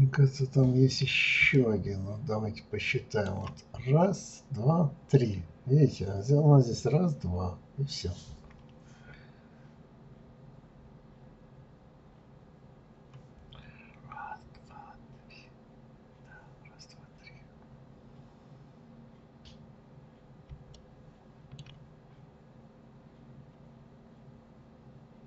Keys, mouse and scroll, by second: 0.4-0.8 scroll up 2, 0.9-1.5 scroll down 1, 1.5-4.5 shift+middle drag, 6.1-6.7 scroll down 2, 20.0-20.7 scroll up 1, 20.7-22.2 shift+middle drag, 22.2-22.5 scroll up 2, 23.9 scroll down 2.